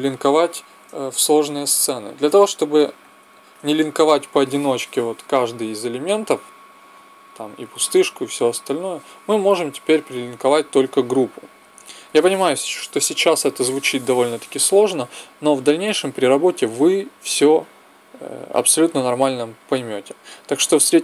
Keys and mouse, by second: 2.2 click, 5.7-7.3 drag, 8.0-20.7 drag.